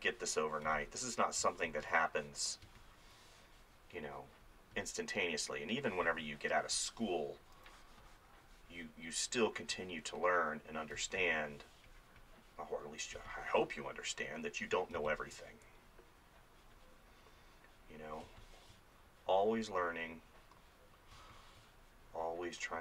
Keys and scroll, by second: 0.7 space, 6.1 space, 11.0 space, 13.2 space, 15.0 space, 18.3 space, 21.2 space.